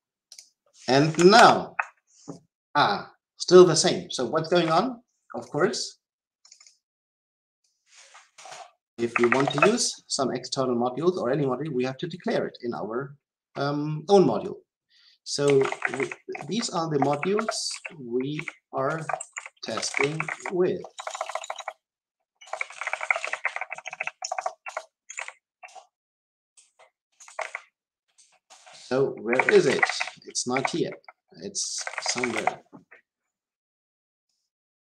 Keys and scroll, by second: 1.3 alt+Return, 25.6 Return.